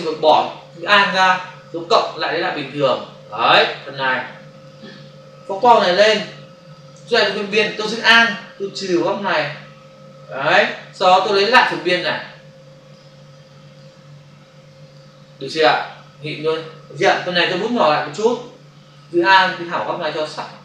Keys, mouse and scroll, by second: 1.5 click, 4.1 click, 5.4 space, 5.6 ctrl+click, 8.5 alt+click, 11.6 click, 13.3 click, 14.6 click, 17.8-18.5 typing, 19.3 alt+click.